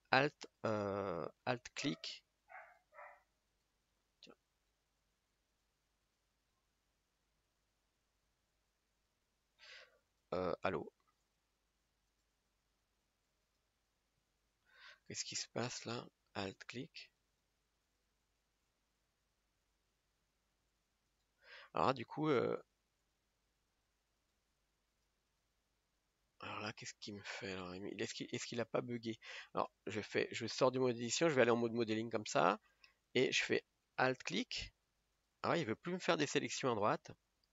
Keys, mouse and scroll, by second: 2.6-4.0 alt+shift+right drag, 4.0 scroll down 2, 4.5-5.5 middle drag, 5.5-6.5 alt+right drag, 6.5-10.1 middle drag, 10.1-11.2 alt+shift+right drag, 11.2 click, 12.1-15.0 alt+right drag, 15.0 ctrl+z, 16.5-19.6 alt+right drag, 19.6-21.1 middle drag, 21.1-23.0 alt+right drag, 23.0-24.2 drag, 24.2-27.1 alt+right drag, 28.2 click, 28.7 scroll down 3, 29.0 middle click, 29.7 Tab, 31.2 click, 31.9 scroll up 1, 32.4 scroll up 5, 32.5-37.5 middle drag.